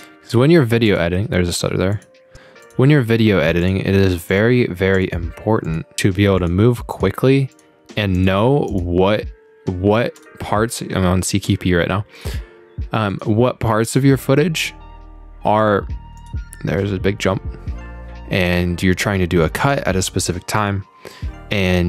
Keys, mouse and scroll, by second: 0.9 click, 1.9 click, 2.6 click, 3.6 click, 4.3 click, 5.0 click, 5.7 click, 6.4 click, 6.9 click, 7.5 click, 8.2 click, 8.7 click, 10.2 click, 12.2 click, 13.1 click, 13.9 click, 14.6 click, 16.2 click, 19.7 click, 20.6 click.